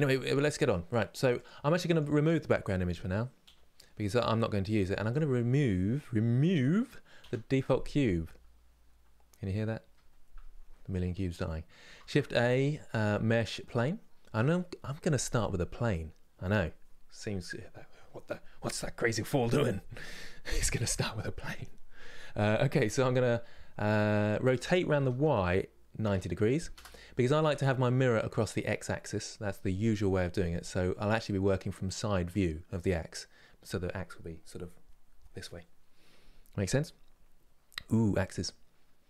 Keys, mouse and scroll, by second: 1.0 click, 1.6 click, 3.1 Delete, 4.8 click, 5.4-6.9 middle drag, 6.9 Delete, 11.7 shift+a, 27.1 scroll up 3, 27.6-33.6 middle drag.